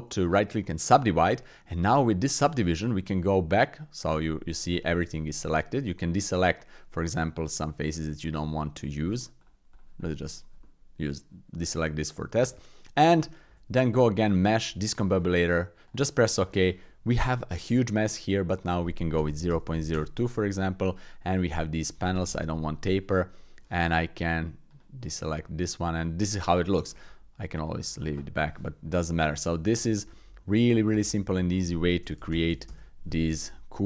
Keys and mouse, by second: 1.5 middle click, 2.4 Tab, 4.1 Tab, 4.9-6.1 drag, 6.4 click, 7.6-8.6 shift+drag, 8.8 click, 9.3 shift+click, 9.7 shift+click, 10.6 click, 12.3 Tab, 13.5 shift+a, 17.3 click, 18.7-20.0 drag, 20.9 middle click, 21.7 click, 23.2 middle click, 24.7 click, 25.4 middle click, 26.2 middle click, 27.5 click, 28.9-29.5 middle drag, 29.7 middle click, 31.5-32.8 drag, 33.4-33.8 middle drag.